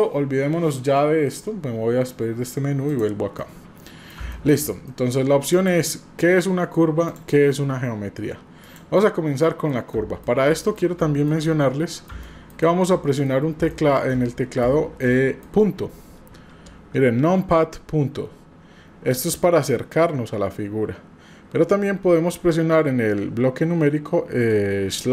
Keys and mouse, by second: 3.4-4.1 middle drag, 4.3 middle click, 4.8 middle drag, 5.6 drag, 7.1 drag, 8.7 drag, 9.4 middle click, 9.9-10.2 middle drag, 10.4 middle click, 11.0-11.3 middle drag, 11.4-12.1 middle drag, 12.2 middle drag, 12.6-13.3 middle drag, 13.7 shift+middle drag, 14.1-15.4 shift+middle drag, 16.3 KP_Decimal.